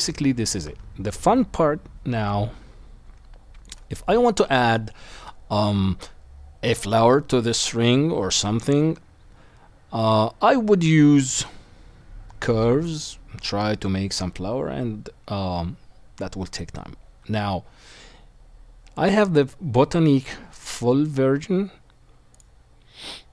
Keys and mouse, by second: 2.3-3.7 drag, 2.3-4.1 middle drag, 2.3-23.3 right drag, 20.6-23.3 drag, 20.6-23.3 middle drag.